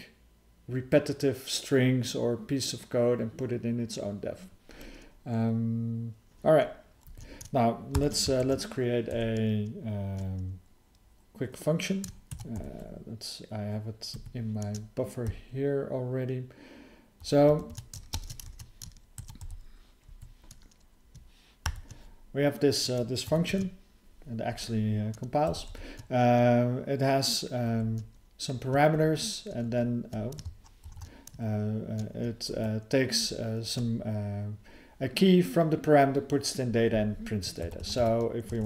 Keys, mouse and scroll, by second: 7.9 ctrl+k, 8.4 (, 9.1 BackSpace, 18.1 ctrl+alt+space, 18.5 alt+w, 21.6 ctrl+y, 23.5 ctrl+e, 29.6 alt+d, 30.8 ctrl+_, 32.5 alt+f, 33.2 alt+f.